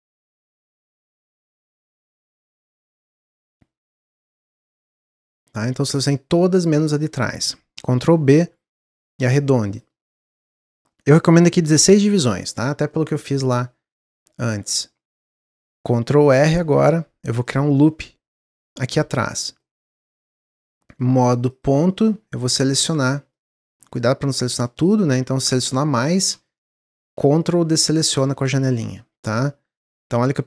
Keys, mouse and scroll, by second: 0.6 shift+click, 0.9 shift+click, 1.6 shift+click, 2.1-7.9 middle drag, 7.9 ctrl+b, 10.0 middle click, 10.7-12.9 drag, 12.9-16.8 middle drag, 16.8 ctrl+r, 19.6-21.5 middle drag, 21.5 click, 22.3 click, 23.3 middle click, 23.8 ctrl+click, 24.6 middle click, 25.5 ctrl+click, 28.9-30.0 middle drag, 30.0 scroll up 1.